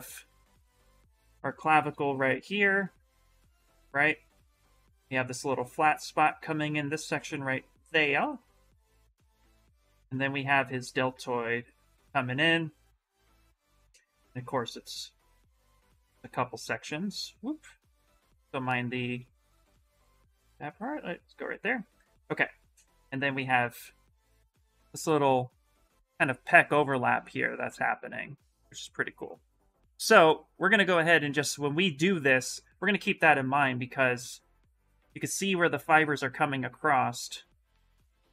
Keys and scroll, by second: 18.0 ctrl+z, 18.1 ctrl+z, 18.2 ctrl+z, 18.4 ctrl+z, 18.5 ctrl+z, 18.6 ctrl+z, 18.9 ctrl+z, 19.2 ctrl+z, 19.6 ctrl+z.